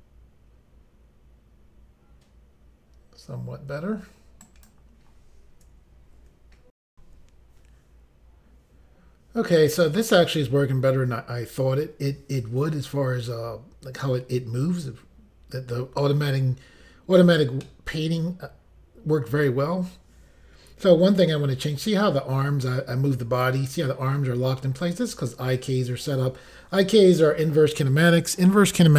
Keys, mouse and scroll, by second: 4.5 right click, 6.9 Insert, 17.6 middle click, 20.8 g, 25.2 right click.